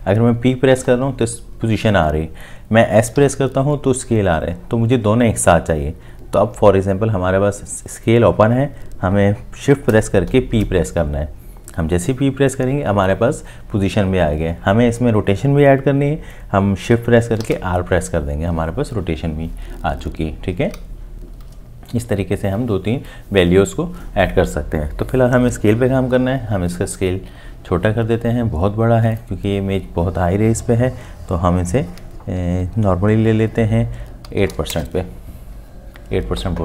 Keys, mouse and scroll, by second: 0.8 p, 3.2 s, 10.3 shift+p, 17.4 shift+r, 34.3 8, 34.7 Return.